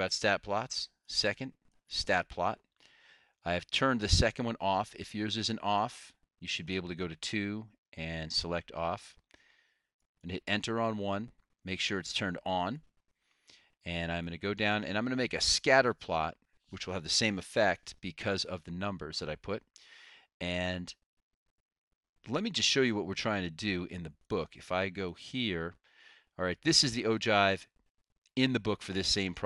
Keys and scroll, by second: 10.3 Return, 13.0 Return, 14.3 Down.